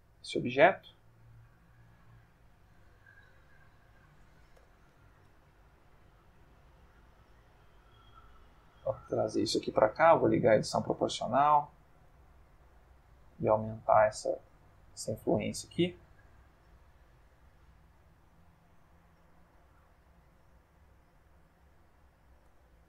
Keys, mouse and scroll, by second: 0.0 click, 1.7 click, 2.6 Tab, 4.0 click, 4.6 o, 5.2 g, 8.5 click, 10.0 o, 11.1 o, 12.4 g, 13.9 scroll up 2, 14.1-14.7 scroll down 2, 15.1-15.6 scroll down 2, 16.1-16.8 scroll down 2, 19.1 click, 20.4 s, 21.6 Escape, 22.5 Tab.